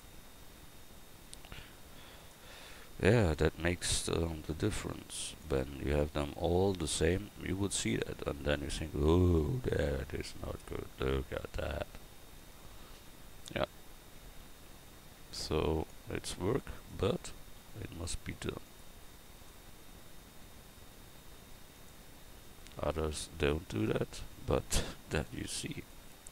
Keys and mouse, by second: 7.8 Tab, 11.7 Tab, 14.4 g, 16.8-18.6 right drag, 23.7 Tab, 25.1 right click, 25.4 Tab.